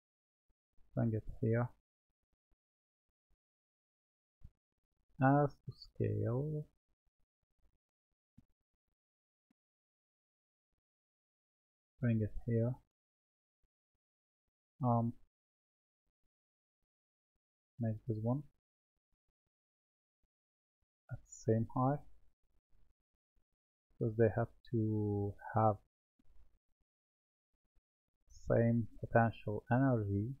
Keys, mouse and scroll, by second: 0.8 click, 5.0 s, 10.0 click, 15.7 click, 17.6 drag, 22.7 click, 27.6 click, 29.9 click.